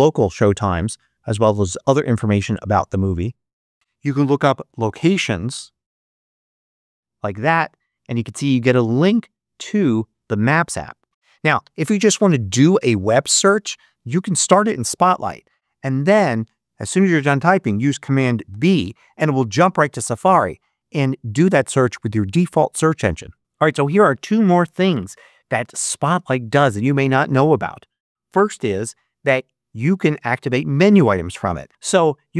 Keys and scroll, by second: 3.7 super+BackSpace, 4.2-7.0 typing, 18.4 super+b.